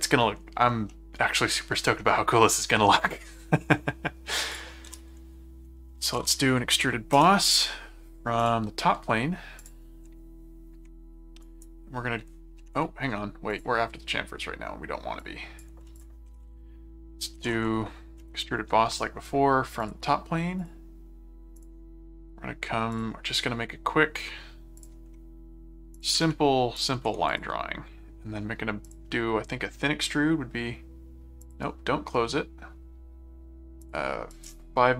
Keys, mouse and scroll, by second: 0.9 middle click, 2.0-3.6 middle drag, 4.5 click, 4.8-6.7 typing, 7.1 Return, 8.4 click, 9.6 ctrl+click, 10.0 ctrl+5, 11.4 right click, 13.5 click, 15.2 click, 16.0 click, 16.3-18.0 typing, 18.2 Return, 19.8 click, 20.6 click, 21.6 click, 22.9 click, 24.8 click, 25.9 click, 26.8 alt+click, 26.9 alt+v, 28.9 click, 31.4 click, 33.8 click.